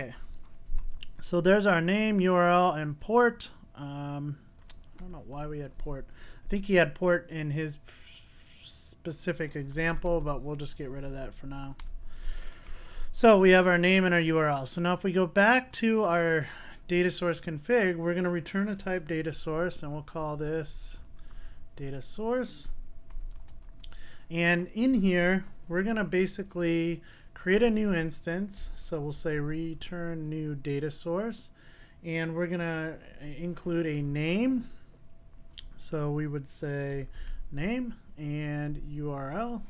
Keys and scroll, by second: 0.2 super+s, 12.8 super+s, 21.9 Return, 27.7 Return, 30.7 Return, 39.3 Return.